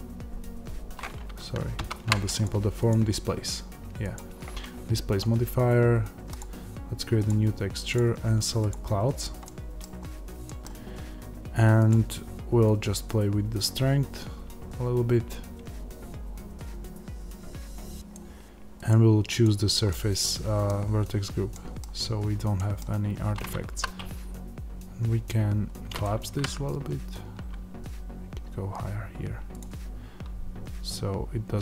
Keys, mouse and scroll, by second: 1.7 ctrl+z, 9.3-12.7 middle drag, 9.7-10.4 scroll down 1, 12.7-19.8 drag, 19.8-25.9 middle drag, 23.6 s, 25.9 click, 26.3-29.5 middle drag, 26.3 g, 29.5 click.